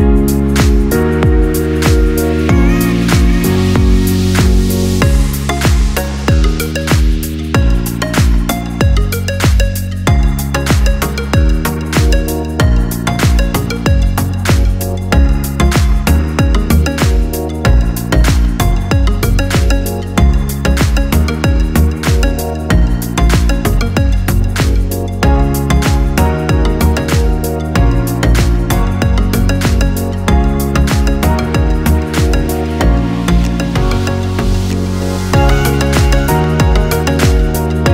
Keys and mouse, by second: 3.8 shift+d, 8.2-10.7 middle drag, 10.7 g, 12.5 r, 14.2-18.6 ctrl+middle drag, 18.6-19.6 drag, 19.6-21.9 middle drag, 21.9-31.3 drag, 31.3-33.7 ctrl+middle drag, 33.7 z, 37.4-37.9 drag.